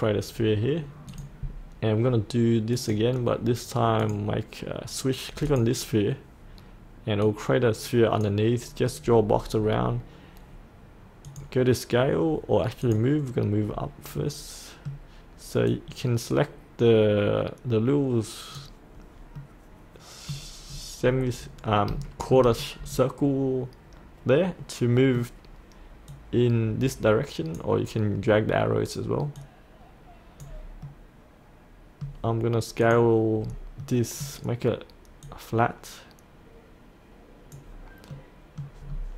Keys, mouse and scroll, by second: 1.0-9.1 drag, 9.2 scroll up 1, 9.5-11.2 scroll down 1, 11.2 click, 14.2 middle click, 15.7-19.3 drag, 19.4 middle click, 20.6-21.6 scroll down 1, 21.7 scroll up 1, 22.0 shift+middle click, 22.6-25.4 middle drag, 26.0-30.5 drag, 30.8-32.6 middle drag, 32.8 click, 33.7 middle click, 35.2-37.7 drag, 38.1 middle click, 38.8-39.1 scroll down 1.